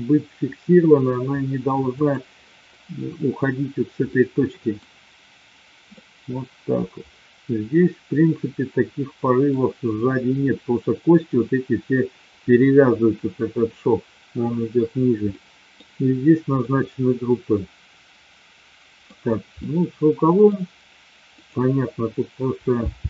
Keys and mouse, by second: 1.9 click, 4.0-4.8 middle drag, 5.9-9.5 middle drag, 15.3-15.8 middle drag, 16.5-19.2 middle drag, 19.5-20.5 middle drag, 21.3-22.2 drag, 22.8 g.